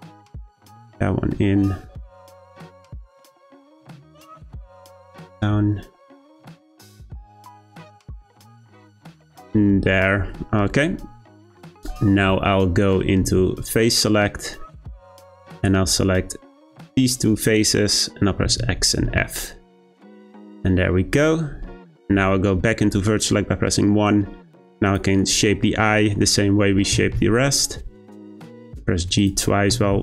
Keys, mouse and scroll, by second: 0.2 g, 4.1 click, 4.5 g, 7.0 click, 7.3 g, 9.4-12.4 scroll down 1, 13.2 3, 15.6 click, 18.4 x, 21.5 1, 24.8 click, 26.9 g, 29.2 click, 29.7 g.